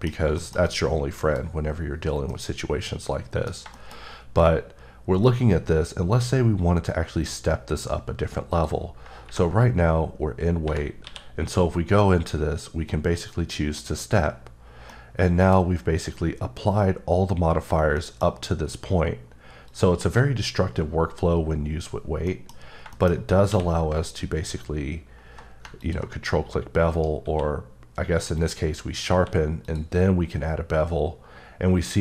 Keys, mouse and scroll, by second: 0.1 scroll down 2, 3.9 shift+scroll up 2, 6.3 scroll up 1, 8.5 click, 13.3 click, 14.5-14.9 scroll down 1, 14.9 middle click, 15.6 scroll up 2, 17.7 scroll down 1, 17.9 middle click, 18.3 scroll up 1, 19.7 click, 22.6-23.2 scroll up 2, 22.9 middle click, 23.4 q, 25.8 ctrl+click, 26.9 right click, 27.3 q, 29.1 q, 29.6 click.